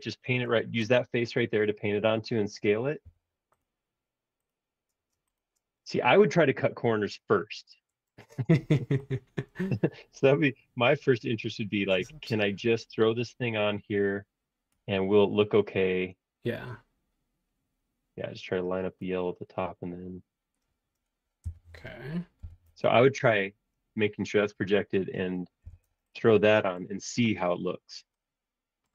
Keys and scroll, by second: 3.0 b, 21.5 Return, 22.4 b, 25.6 b.